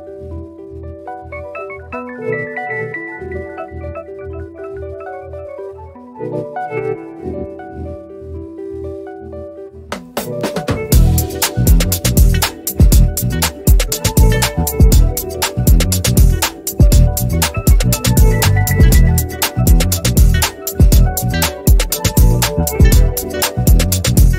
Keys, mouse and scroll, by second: 0.7 4, 0.9 Return, 3.1 click, 8.2 v, 8.7-12.8 drag, 13.2-14.2 typing, 15.0 scroll down 1, 16.6-20.8 drag, 20.8 ctrl+scroll up 1, 21.3 ctrl+scroll down 1, 22.8-24.1 drag.